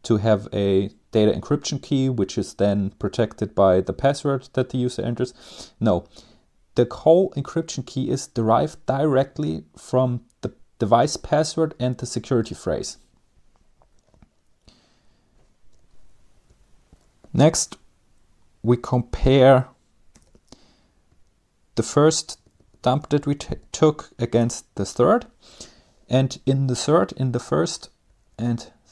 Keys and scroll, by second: 16.0 Up, 16.8 Left, 17.4 Left, 17.5-18.2 Left, 18.5 Left, 18.6 Left, 19.7 typing, 20.7 Right, 21.3 Right, 21.8 Right, 22.0 Right, 22.1 Right, 22.4 Right, 22.5-23.2 typing, 24.0 Return, 27.3 Page_Down, 27.6 Page_Down, 27.8 Page_Down, 28.8 Down.